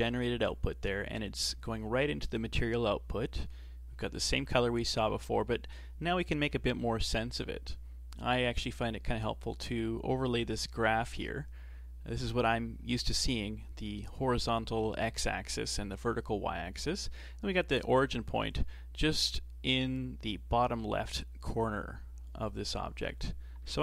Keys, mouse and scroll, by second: 8.7 click, 17.8 click.